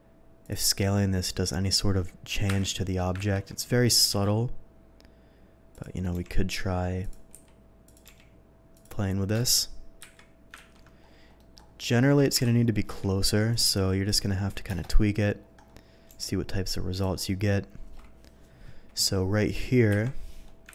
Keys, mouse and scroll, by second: 0.4 click, 0.7 middle click, 2.5 Delete, 3.3 ctrl+z, 3.9 r, 4.2 z, 5.7 click, 7.0 click, 7.0 g, 7.3 s, 7.8 click, 8.0 g, 8.7 click, 10.0 Delete, 10.7 ctrl+z, 11.4 middle click, 12.3 KP_7, 12.9 r, 13.5 click, 13.7 g, 14.1 click, 14.7 KP_0, 16.1 g, 16.9 click, 17.2-18.8 middle drag, 20.1 Delete.